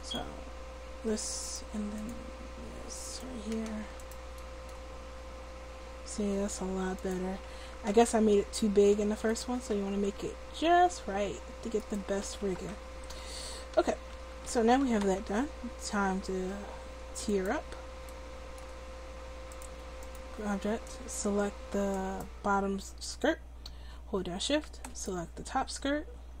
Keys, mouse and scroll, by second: 0.0-4.3 drag, 4.4-7.1 drag, 4.4 middle click, 4.4 right click, 4.8 r, 7.5 a, 7.6 a, 7.9 alt+r, 9.6 right click, 9.8 r, 10.0 click, 12.2 a, 12.4 a, 12.7 alt+r, 13.5 a, 13.7 a, 14.2 a, 14.5 alt+r, 17.3-19.3 drag, 20.2 click, 22.0-24.5 drag, 25.0-26.4 middle drag.